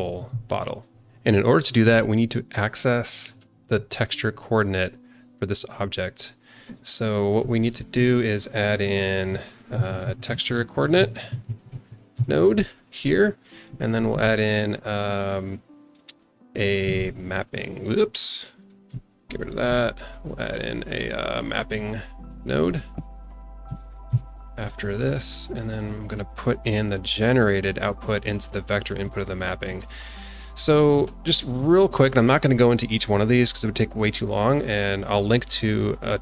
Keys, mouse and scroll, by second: 0.4 alt+middle click, 2.9 scroll down 2, 3.2 shift+middle click, 6.5 click, 9.1 shift+a, 13.9 shift+a, 18.8 x, 20.1 shift+a, 25.6 click, 26.1 click, 27.1-28.6 drag, 29.0 click, 29.6 click, 30.2-30.9 scroll up 4, 31.0 shift+middle click, 31.6 scroll up 1.